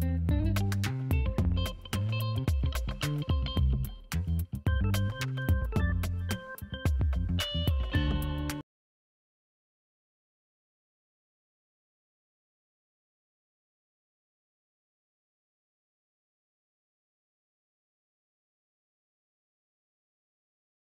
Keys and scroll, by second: 1.4 ctrl+alt+d, 1.5 2, 1.6 Return, 1.7 Delete, 2.0 ctrl+d, 5.1 ctrl+alt+d, 5.2 Return, 5.3 Delete, 5.6 ctrl+d, 5.8 space, 6.1 v, 7.3 ctrl+space.